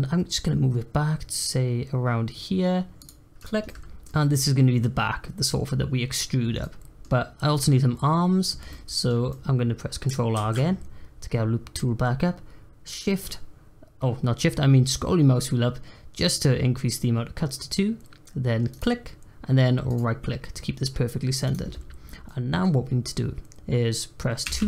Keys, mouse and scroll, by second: 3.3 click, 3.6-10.3 middle drag, 10.3 ctrl+r, 21.4 click, 22.2-24.4 middle drag, 24.4 2.